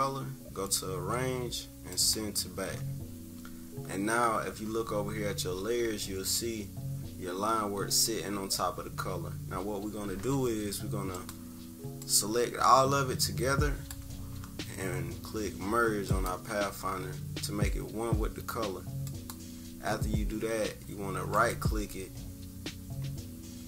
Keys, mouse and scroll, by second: 1.9 click, 11.1-19.3 drag.